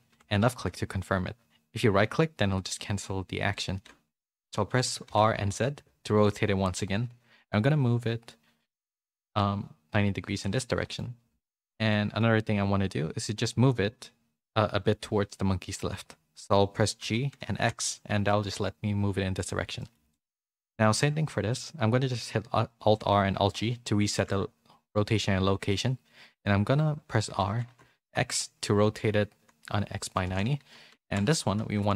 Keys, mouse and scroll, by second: 10.3 middle click, 11.4 shift+middle click, 11.9 middle click, 19.8 middle click, 20.1 shift+middle click, 20.3 middle click, 22.8 alt+r, 23.4 alt+g, 24.1 shift+middle click.